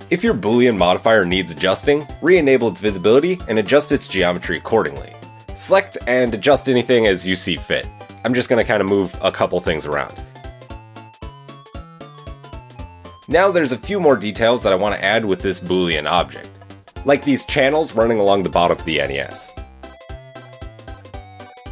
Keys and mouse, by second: 0.9 Tab, 2.0 Tab, 3.1 click, 4.1 Tab, 4.5 Tab, 4.7 click, 5.0 Tab, 6.0 shift+click, 6.6 KP_3, 6.9 KP_1, 7.0 ctrl+middle click, 8.6 g, 11.0 ctrl+KP_1, 12.1 middle click, 12.5 Tab, 12.7 middle click, 15.3-20.0 middle drag, 20.0 click, 20.2-21.1 middle drag, 21.1 click, 21.3 middle click.